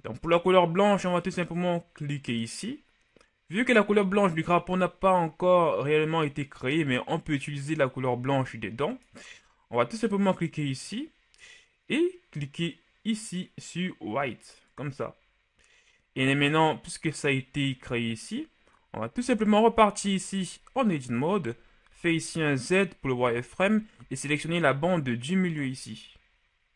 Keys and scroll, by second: 19.4 Tab, 21.2 z, 21.9 z, 24.0 c.